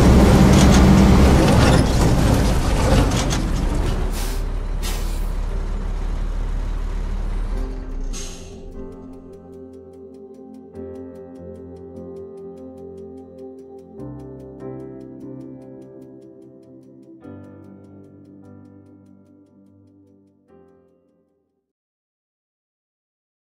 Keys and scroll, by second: 0.1 a, 1.5 q, 2.8 s, 4.1 s.